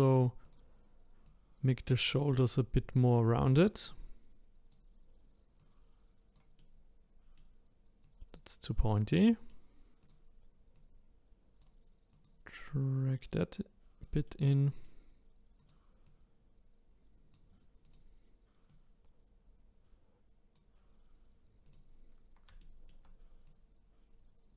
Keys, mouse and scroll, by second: 0.4 click, 1.2-2.5 drag, 2.5-4.0 middle drag, 4.0 click, 5.6 click, 6.6-8.0 middle drag, 8.0 click, 9.2 middle click, 10.0 click, 10.7 click, 12.1 click, 13.0 click, 14.2-15.6 middle drag, 15.6 click, 16.0 click, 17.8 click, 18.7 click, 21.6 click, 22.1-22.6 scroll up 2, 22.6 shift+middle click, 23.4 click.